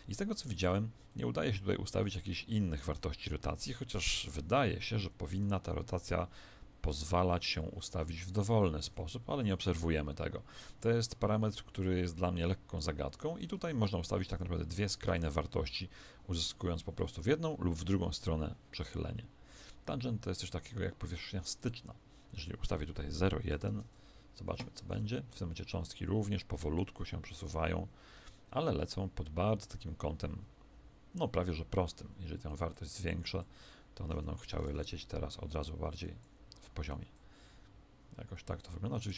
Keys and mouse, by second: 0.2 Escape, 1.0 click, 2.8 alt+a, 5.0 Escape, 8.2 click, 8.8 alt+a, 13.0 Escape, 13.9 click, 15.0 alt+a, 16.4 Escape, 21.6 click, 24.9 alt+a, 27.3 KP_1, 32.4 click, 34.2 Escape, 34.6 alt+a, 36.0-39.1 drag.